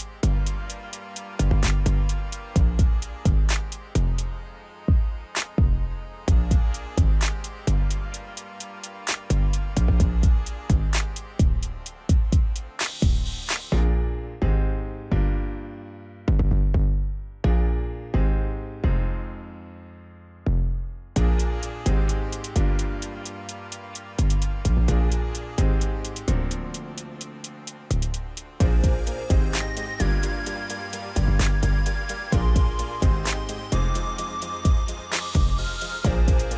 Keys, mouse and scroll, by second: 0.0 Tab, 0.5 middle click, 0.8-2.4 scroll up 2, 2.4 click, 2.6 click, 3.8 2, 5.6 right click, 6.5 click, 9.1 click, 10.0 shift+click, 10.2 shift+click, 10.5 middle click, 11.5 shift+click, 11.7 shift+click, 12.0 middle click, 13.0 shift+click, 13.8 shift+click, 13.9 shift+click, 14.3 middle click, 15.2 shift+click, 15.3 shift+click, 15.7-16.9 middle drag, 16.9 shift+click, 17.0 shift+click, 17.5 middle click, 18.2 shift+click, 18.4 shift+click, 18.7-19.7 middle drag, 19.7 shift+click, 19.9 shift+click, 20.9 KP_1, 21.7-22.7 middle drag, 22.7-23.6 scroll up 1, 23.6 ctrl+b, 27.6 Tab, 27.9 scroll down 2, 28.1-30.2 middle drag, 30.2-31.3 drag, 31.3-31.7 scroll up 1, 31.7 right click, 32.7 Tab, 33.2 middle click, 33.7-34.5 scroll up 1, 34.5 click, 34.6 click, 35.0-36.0 scroll up 1, 36.0 ctrl+b.